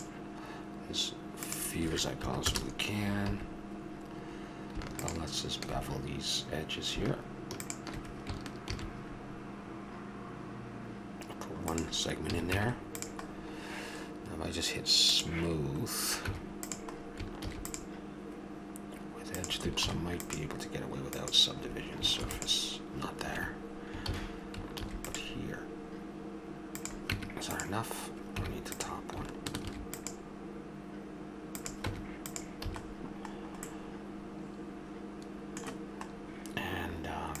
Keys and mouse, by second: 1.4-3.3 drag, 3.3 a, 4.9-11.7 drag, 8.7 ctrl+b, 12.3 a, 12.5 Tab, 15.1-16.7 drag, 16.2 Tab, 17.4 ctrl+r, 24.1 ctrl+z, 27.1 Tab, 28.3 Tab, 29.6 ctrl+r, 31.9 Tab, 32.6 a, 33.0 middle click, 34.4 middle click, 36.1-37.4 middle drag.